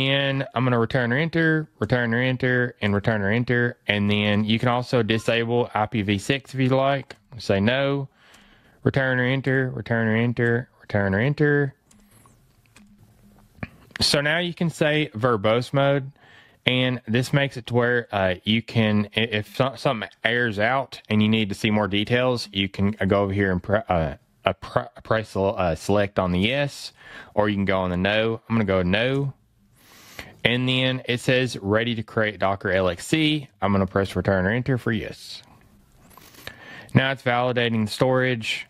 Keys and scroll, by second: 5.1 fn+Left, 6.4 fn+Right, 14.5 fn+Left, 23.0 fn+Right, 23.4 fn+Left, 27.0 fn+Right.